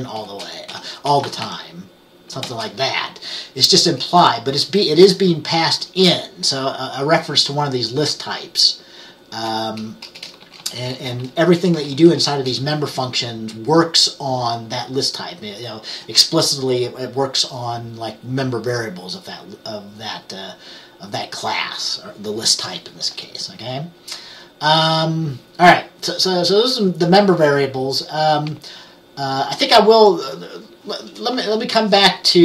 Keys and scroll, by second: 0.0-2.6 typing, 5.4 BackSpace, 10.2-12.4 typing.